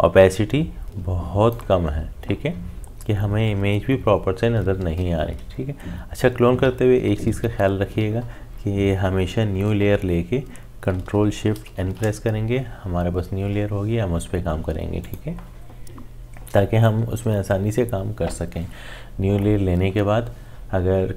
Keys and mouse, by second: 7.1 ctrl+z, 10.8 ctrl+z, 11.7 ctrl+shift+n, 15.0 click.